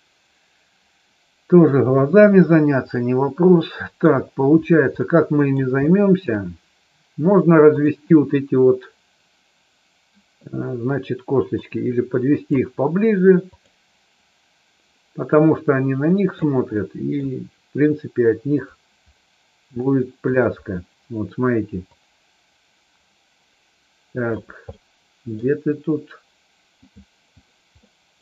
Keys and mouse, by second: 2.3 click, 2.9-4.1 middle drag, 4.9 middle click, 5.8 shift+middle click, 7.6 click, 11.5 click, 13.4 click, 15.4-16.4 drag, 16.8 middle click, 19.8 shift+middle click, 21.9-24.3 drag, 24.6 middle click, 26.8 click, 27.8 middle click.